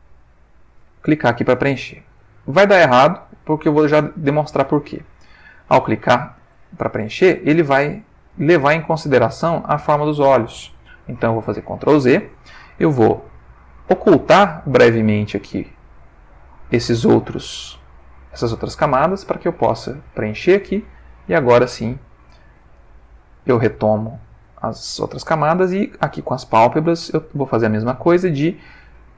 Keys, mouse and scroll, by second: 0.0 click, 5.0 click, 11.3 ctrl+z, 13.8 click, 14.9 click, 15.5 click, 19.4 click, 21.2 click, 21.6 click, 23.0 ctrl+middle click.